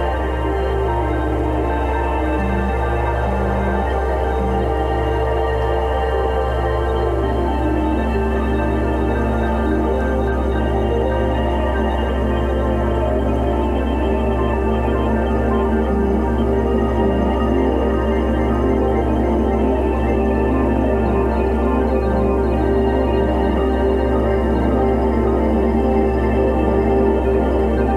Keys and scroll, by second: 1.4 space, 3.2 x, 4.5-6.5 typing, 7.8 space, 8.9 x, 11.8-14.4 typing, 15.2 alt+super+z, 15.8 x, 17.3 [, 19.4-21.8 typing, 23.0 x, 23.3 space, 23.9 x, 24.4 x, 26.1-27.9 typing.